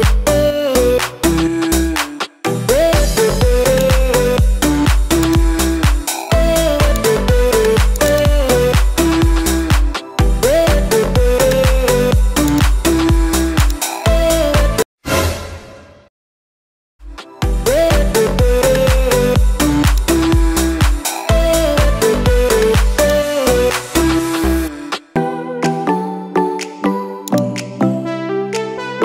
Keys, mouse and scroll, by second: 7.0 click, 8.0 click, 8.1-10.4 drag, 11.4 click, 12.6-14.0 drag, 17.8 KP_Divide, 20.0-23.1 drag, 27.3-29.0 drag.